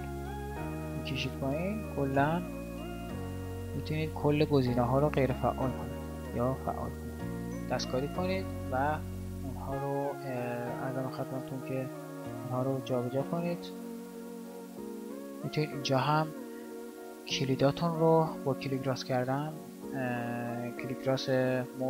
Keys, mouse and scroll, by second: 11.1 right click.